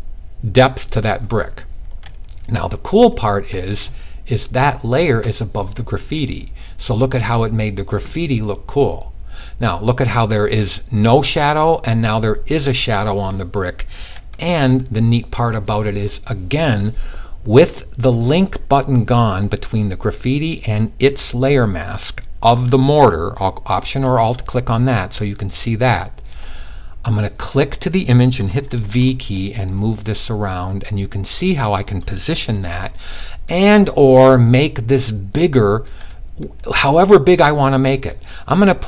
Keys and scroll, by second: 28.1 v.